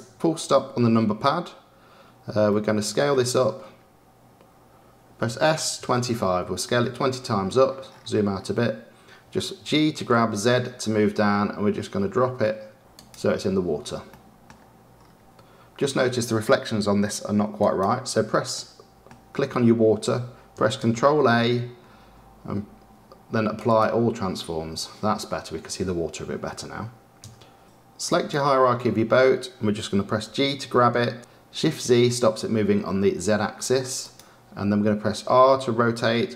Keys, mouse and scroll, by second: 5.2 s, 7.4-8.2 scroll down 5, 8.3 middle click, 8.6-9.6 scroll down 6, 9.6 scroll down 1, 9.6 g, 14.0-14.9 middle drag, 14.9-17.5 scroll down 3, 17.5 click, 18.5-21.1 middle drag, 21.1 ctrl+a, 27.6-30.2 right drag, 30.2 g, 35.1 r.